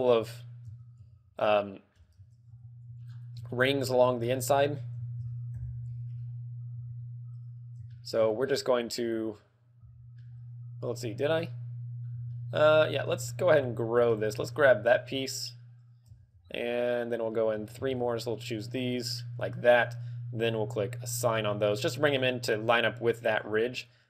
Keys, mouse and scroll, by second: 0.8 Tab, 1.0 z, 1.4 middle click, 1.9 z, 2.4 KP_1, 2.8 z, 3.0-3.4 scroll down 2, 3.4 shift+middle click, 4.1 scroll down 3, 4.5 shift+middle click, 5.5 KP_Decimal, 6.1-6.4 scroll up 3, 6.7 z, 7.8 shift+middle click, 8.4 scroll up 3, 9.0 z, 9.7 z, 10.1 middle click, 11.5 middle click, 12.3 shift+middle click, 12.3 shift+middle click, 13.0 z, 14.1 z, 14.5 alt+shift+right click, 15.1 KP_1, 16.3 z, 17.3 KP_1, 17.5 z, 18.0 alt+shift+right click, 18.8 alt+shift+right click, 19.4 alt+shift+right click, 21.1 click, 21.4 click.